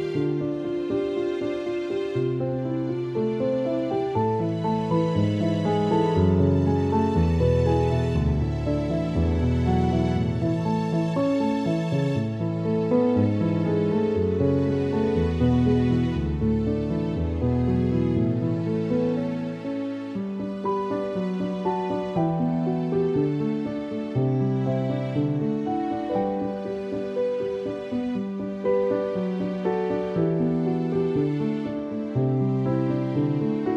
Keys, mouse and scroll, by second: 0.6 ctrl+z, 1.0 alt+click, 2.7 alt+click, 3.9 alt+click, 5.1 alt+click, 7.2 click, 7.4 space, 7.7 alt+click, 9.2 space, 9.4 click, 9.5 space, 10.0 alt+click, 10.8 alt+click, 11.6 alt+click, 12.4 alt+click, 13.4 space, 13.6 click, 13.8 space, 14.3 alt+click, 15.0 alt+click, 16.0 alt+click, 18.3 alt+click, 19.7 alt+click, 20.1-20.5 typing, 21.1 alt+click, 22.5 alt+click, 23.8 alt+click, 24.9 space, 25.1 click, 25.3 space, 25.7 alt+click, 27.3 alt+click, 29.1 alt+click, 32.8 space, 32.9 click, 33.1 space, 33.4 alt+click.